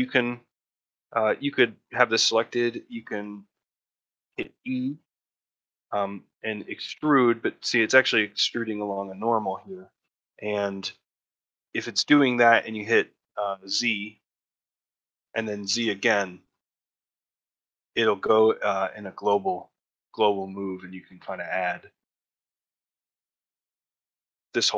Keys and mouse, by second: 0.5 ctrl+middle click, 0.9 shift+middle click, 2.4 alt+middle click, 2.7 shift+middle click.